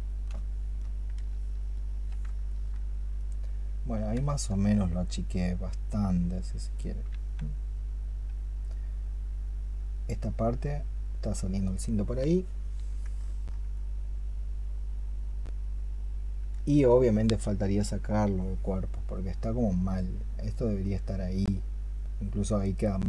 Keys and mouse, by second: 1.6 shift+click, 6.6 double click, 13.1 alt+click.